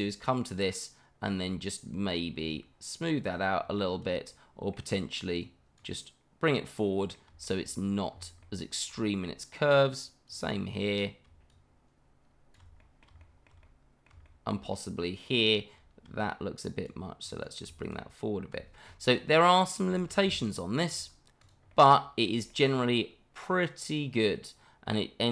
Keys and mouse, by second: 4.3 middle click, 5.4 click, 6.5 middle click, 7.4 shift+middle click, 8.4 middle click, 9.1 shift+middle click, 12.8 middle click, 13.2 shift+middle click, 13.6 middle click, 14.2 shift+middle click, 14.7 middle click, 16.2 click, 17.2 click, 18.9 middle click, 19.5 middle click, 19.9 shift+middle click, 21.0 Tab, 21.4 click, 21.7-22.2 middle drag, 22.5 shift+middle drag, 23.5-25.3 middle drag.